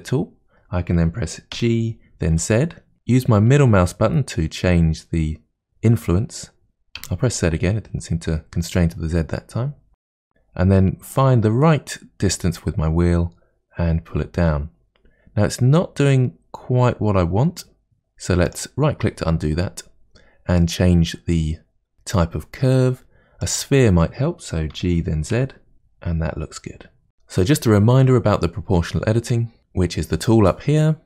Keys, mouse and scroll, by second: 1.5 g, 20.6-21.9 drag, 24.7 g, 27.1-29.3 shift+middle drag, 29.6 click.